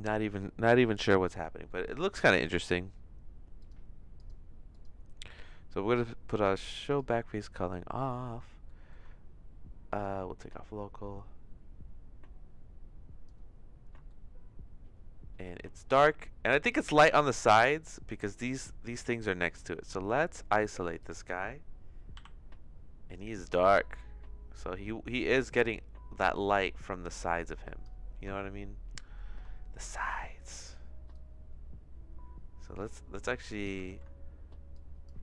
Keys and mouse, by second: 1.6 middle click, 3.6 click, 4.2 click, 4.7 click, 6.3 click, 6.9 click, 8.6 shift+middle click, 9.9 click, 10.6-13.2 drag, 14.0-16.9 shift+middle drag, 18.4 click, 22.1 KP_Divide, 23.6 click, 25.2-27.8 drag, 28.3 shift+middle click, 30.0 click, 31.2-33.6 drag, 33.9 ctrl+z, 34.7 click.